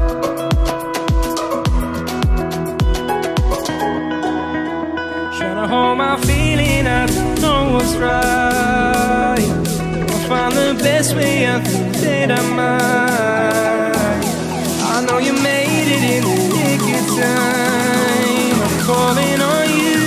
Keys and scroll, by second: 0.9 ctrl+=.